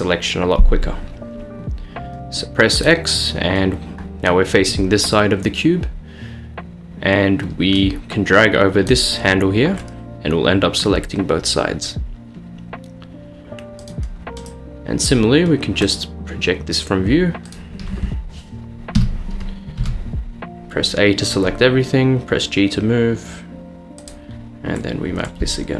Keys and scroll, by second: 19.2 a, 19.8 g.